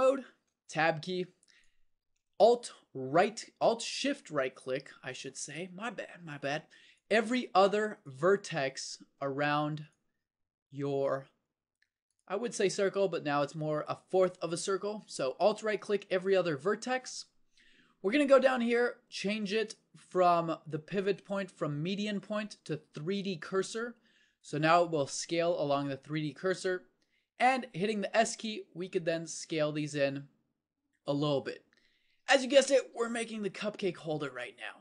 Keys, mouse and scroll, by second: 0.4 Tab, 28.0 s.